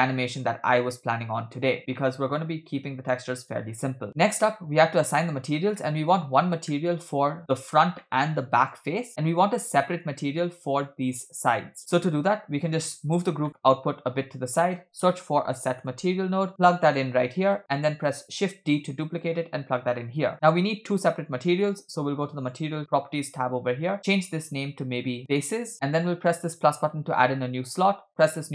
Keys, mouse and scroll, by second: 1.8 scroll down 2, 1.9-3.1 middle drag, 3.6-4.1 shift+middle drag, 4.1 scroll up 4, 5.8 middle click, 6.7 shift+middle click, 8.0-8.7 middle drag, 9.2-10.0 middle drag, 11.8 middle click, 11.8 scroll down 2, 12.0-13.3 drag, 13.5 middle click, 13.9 shift+a, 17.5 click, 18.2 shift+d, 20.3 click, 22.4 click, 24.3-25.6 drag, 26.4 click, 28.2-28.5 drag.